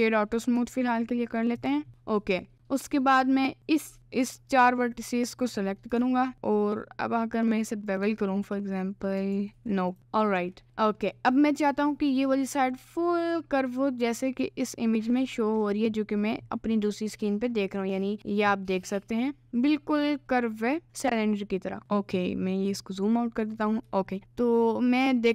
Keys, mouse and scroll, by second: 0.6 Tab, 1.1 middle click, 1.7 click, 2.5 click, 3.0 middle click, 5.6 middle click, 6.0 ctrl+b, 8.0 Tab, 8.5 middle click, 9.3 ctrl+z, 10.0 Tab, 10.0 middle click, 10.6 middle click, 11.2 c, 23.7 middle click, 24.6 click.